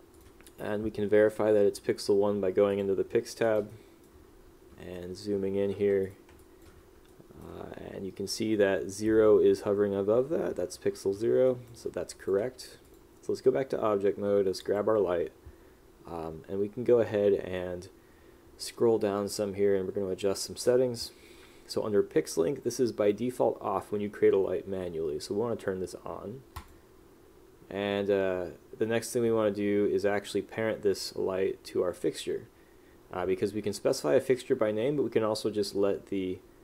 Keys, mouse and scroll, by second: 3.6 click, 3.9 right click, 5.1 right click, 6.2 click, 7.3 right click, 11.6 right click, 12.2 click.